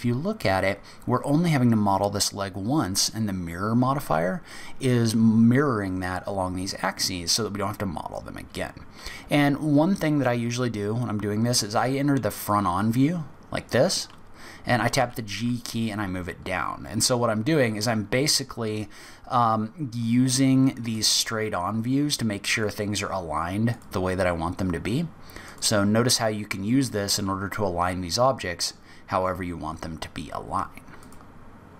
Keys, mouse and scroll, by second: 12.3 click, 14.9 g, 20.9 click, 22.6 click, 23.7 click, 25.4 click, 27.4-28.3 scroll down 6, 28.3 scroll up 2, 28.9-29.6 scroll down 2, 29.6-30.8 scroll up 3, 30.9 click.